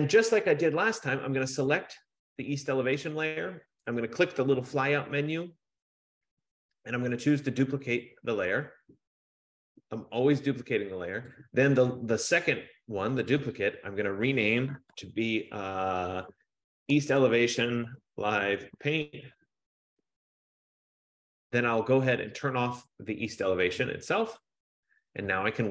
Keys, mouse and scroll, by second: 0.6 click, 0.8 F15, 4.7 click, 8.4 click, 11.6 click, 13.6 click, 13.9 click, 16.8-20.1 typing, 22.9 click.